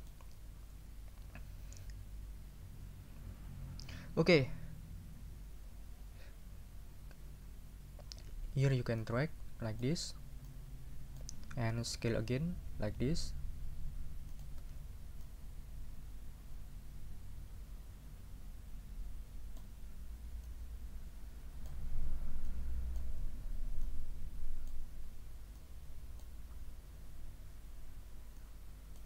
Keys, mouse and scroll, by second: 0.0 click, 9.0-10.0 middle drag, 10.5 middle click, 13.0 s, 14.3 click, 15.2-19.8 drag, 20.4 click, 21.7 middle click, 22.5 middle click, 23.8 click, 25.5 click, 28.4 click.